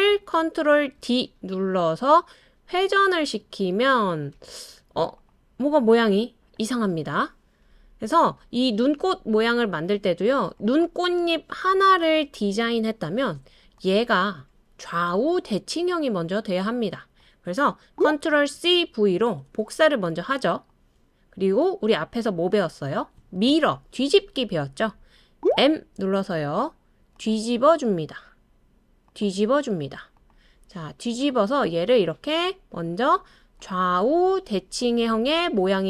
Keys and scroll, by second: 1.0 super+d, 3.8 super+d, 4.3 super+d, 4.8 super+d, 12.7 BackSpace, 18.9 super+c, 19.3 super+v, 25.5 m.